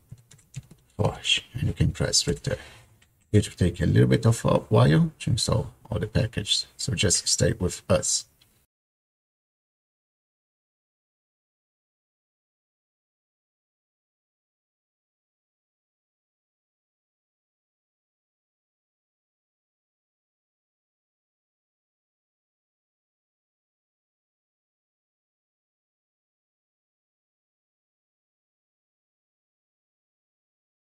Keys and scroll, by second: 0.0-2.3 typing, 11.2 y, 11.3 Return.